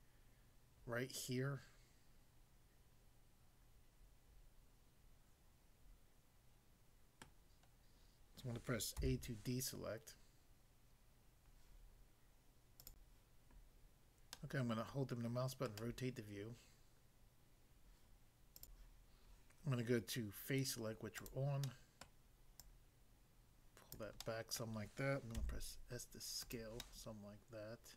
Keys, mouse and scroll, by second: 7.2 middle click, 9.1 a, 12.8 click, 12.9 click, 14.4 middle click, 15.7 middle click, 18.6 click, 18.8 click, 21.1 click, 21.7 middle click, 22.1 middle click, 22.5 click, 23.9 click, 24.3 middle click, 24.6 middle click, 25.3 s, 26.4 click, 26.8 middle click.